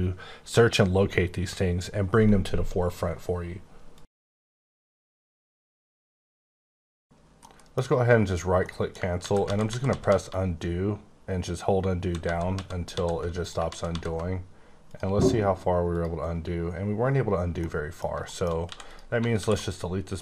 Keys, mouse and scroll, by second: 8.1 right click, 8.6 middle click, 9.1 ctrl+z, 9.4 ctrl+z, 9.9 ctrl+z, 10.0 ctrl+z, 10.2 ctrl+z, 10.6-11.2 ctrl+z, 13.3 click, 13.6 ctrl+z, 13.9 ctrl+z, 14.9 click, 15.9 click, 16.6-16.9 scroll down 4, 17.6 middle click, 18.3 middle click, 18.6 x, 18.7 click, 19.3 alt+w.